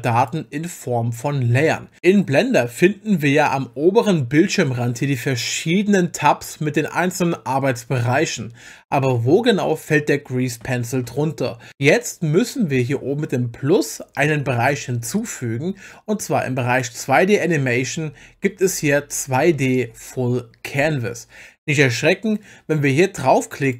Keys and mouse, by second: 0.2 click, 15.2 click.